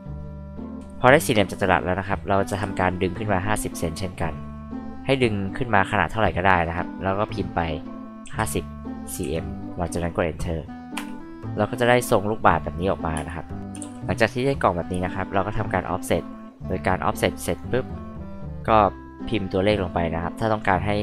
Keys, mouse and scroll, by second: 2.5 p, 4.7-6.6 drag, 8.2-9.7 typing, 10.9 Return, 11.4 click, 13.1 space, 13.8 ctrl+z, 15.1-17.6 drag.